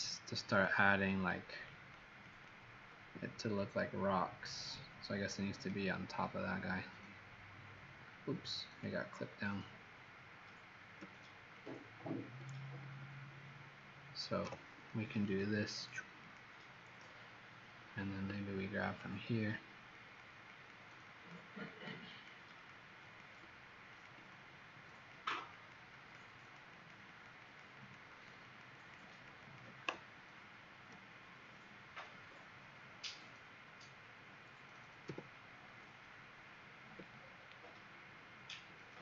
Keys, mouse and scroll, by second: 0.4 click, 1.0 click, 1.7 click, 2.2 click, 4.7 click, 11.5 alt+click, 14.3 ], 15.2 click, 15.8 click, 16.3 click, 18.8 alt+click, 19.9 click, 20.4 click, 21.1 click, 21.6 click, 22.1 click, 22.6 click, 22.9 click, 23.8 alt+click, 25.1 click, 25.4 click, 25.9 click, 26.3 click, 26.7 click, 27.0 click, 27.4 click, 27.8 click, 28.1 click, 28.5 click, 28.6 click, 29.0 click, 29.4 click, 35.0 m, 37.1-38.2 alt+scroll down 4.